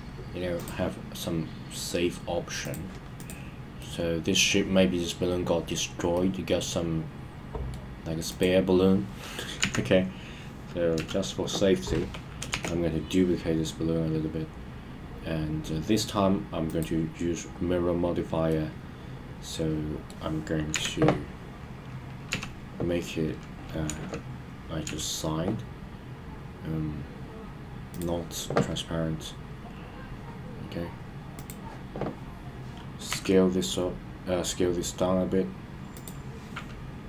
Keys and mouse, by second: 0.6-2.7 drag, 3.2 click, 3.8-4.4 middle drag, 6.1-7.8 middle drag, 8.3 click, 9.6 KP_1, 11.0 KP_3, 12.5 shift+d, 16.7 click, 18.5-20.1 middle drag, 20.7 KP_1, 22.3 KP_3, 23.9 KP_1, 25.7 KP_3, 28.0 click, 33.1 s, 35.9 click.